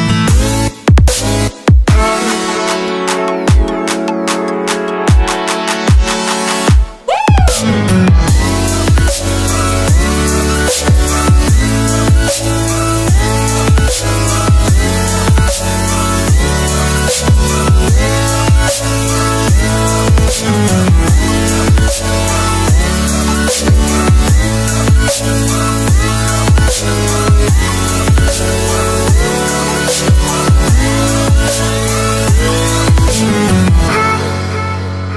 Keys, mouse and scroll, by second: 10.9-11.3 scroll down 1, 13.1 click, 14.1 scroll down 1, 15.0 click, 16.3-18.9 scroll down 1, 18.9 click, 23.0 click, 32.3 click.